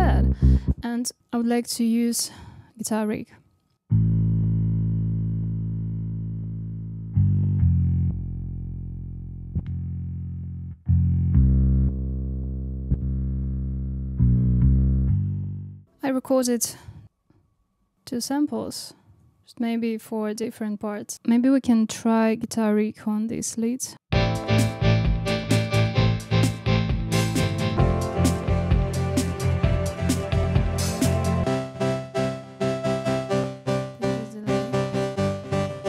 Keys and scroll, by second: 0.6 space, 3.9 space, 19.0 super+d, 21.0 space, 24.1 space.